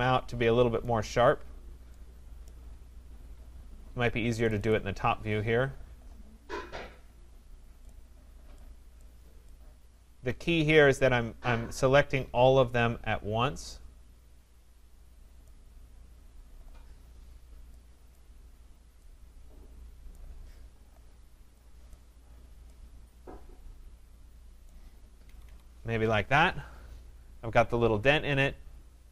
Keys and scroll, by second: 25.2 Escape.